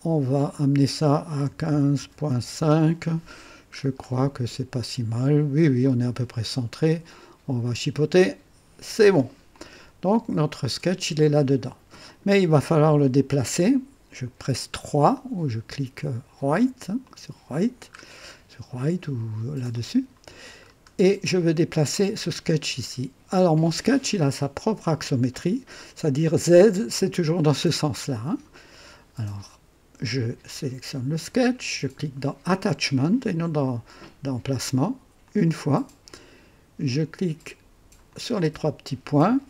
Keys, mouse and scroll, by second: 1.5 KP_1, 1.7 KP_5, 2.0 KP_Decimal, 2.3 KP_5, 2.6 KP_Enter, 3.7 scroll up 1, 4.3-5.9 right drag, 4.3 typing, 6.5-6.8 scroll down 1, 8.1 click, 9.5-11.3 drag, 10.1-10.8 typing, 12.1 click, 17.1 click, 17.9 scroll up 2, 19.7 click, 20.7 scroll up 2, 21.0 right click, 35.2 click, 38.1 click.